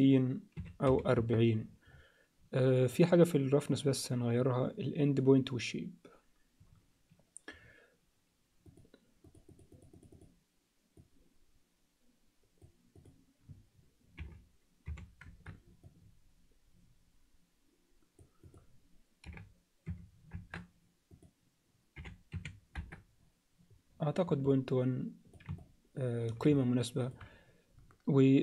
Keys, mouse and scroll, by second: 3.0 click, 8.7 click, 9.3 click, 9.7 click, 10.0 click, 11.0-12.7 drag, 12.9-15.4 drag, 15.8-18.4 drag, 18.5-23.6 drag, 24.5-25.3 alt+middle drag, 25.6-26.3 ctrl+alt+middle drag, 26.6 alt+middle click.